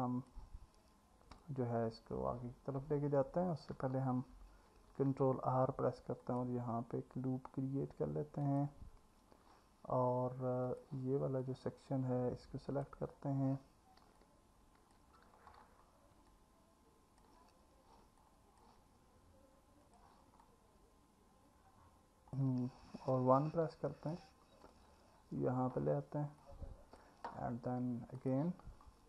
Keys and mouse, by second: 0.0 click, 4.7 ctrl+r, 8.4 click, 10.7 middle click, 11.4-12.9 middle drag, 14.2 alt+middle click, 16.3 alt+middle click, 18.2 alt+middle click, 19.9 click, 20.4-22.4 alt+middle drag, 23.5 KP_1, 26.4 click, 28.2 click.